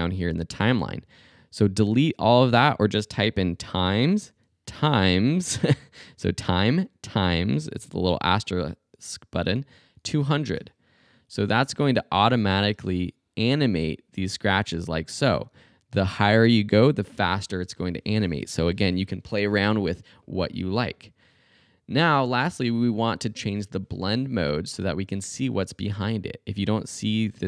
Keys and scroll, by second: 3.1-4.7 typing, 9.4-10.3 typing, 12.7 space.